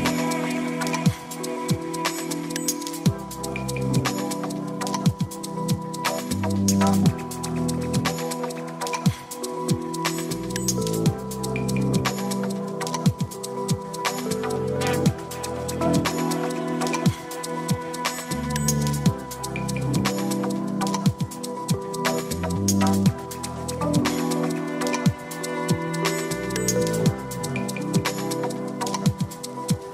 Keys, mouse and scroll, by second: 1.7-3.1 drag, 5.5 click, 6.8 click, 9.4 click, 11.6-12.4 drag, 15.8-17.4 drag, 18.7-20.1 drag, 21.0 click, 21.6 click, 24.9 click, 26.3 click, 28.8 click.